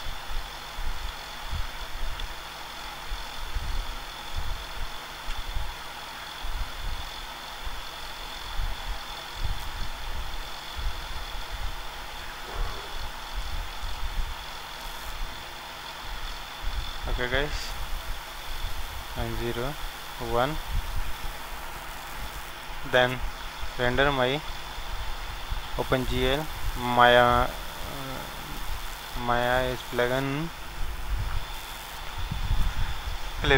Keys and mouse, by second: 1.1 ctrl+a, 2.2 ctrl+a, 5.2 KP_0, 5.2 click, 5.7 click, 7.7 KP_1, 8.2 ctrl+alt+KP_0, 10.6-12.4 drag, 12.0 middle click, 12.4 middle click, 13.8 ctrl+z, 17.0-18.7 drag, 18.7 KP_0, 19.8 KP_1, 26.2-27.9 drag, 33.5 click.